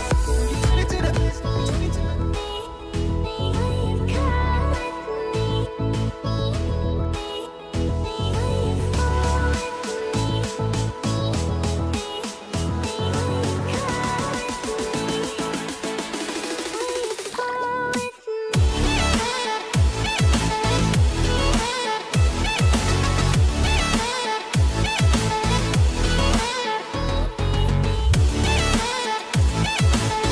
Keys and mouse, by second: 3.9-6.1 drag, 6.6 middle click, 6.7-9.8 right drag, 7.6 ctrl+Tab, 8.3 n, 9.8 middle click, 9.9-11.9 right drag, 11.9 middle click, 11.9-23.3 right drag, 13.4 a, 15.5 click, 16.7 click, 17.4 click, 17.6 click, 18.4 a, 20.0 shift+e, 23.3 middle click, 23.3 right click, 23.9 middle click, 23.9 right click, 24.4-30.3 middle drag.